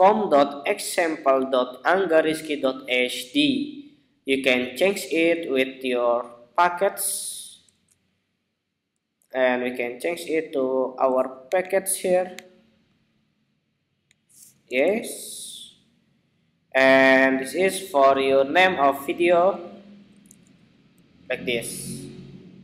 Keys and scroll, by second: 7.4 super+c, 14.5 super+v.